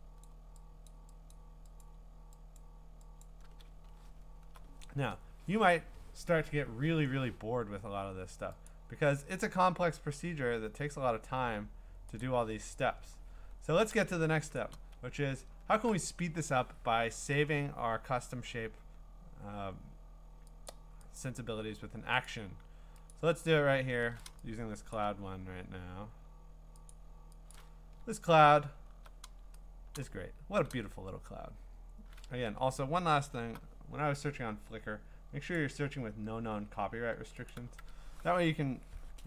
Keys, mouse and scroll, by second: 0.2 click, 0.9 click, 1.3 click, 1.9 click, 2.6 click, 3.2 click, 3.7-4.3 scroll, 8.7 click, 10.1-12.2 scroll, 12.2 click, 12.7-13.3 scroll, 12.8 click, 14.5-15.1 scroll, 14.6 click, 19.6-19.9 scroll, 20.7 click, 21.2 click, 21.2 scroll, 22.3 click, 23.1 click, 23.5-24.0 ctrl+scroll, 24.8 scroll, 24.9 click, 25.6-26.8 scroll, 26.9 click, 27.5 click, 28.5-29.0 scroll, 30.0 click, 30.4 scroll, 32.4 alt+Tab, 33.2 alt+Tab, 35.6 click, 37.5 click, 37.8 alt+Tab.